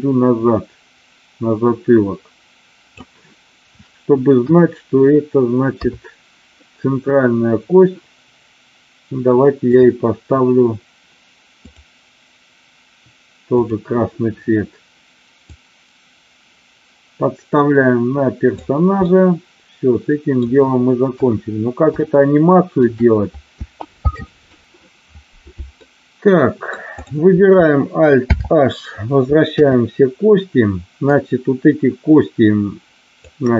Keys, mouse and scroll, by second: 4.4 KP_1, 5.7 KP_3, 9.7 click, 11.6 click, 13.6 click, 15.5-18.6 drag, 19.0-20.4 middle drag, 21.0 KP_1, 21.9-22.9 shift+scroll up 1, 25.8-26.7 scroll up 1, 26.9 click, 28.3 alt+h, 29.4 KP_3, 31.1-33.3 drag.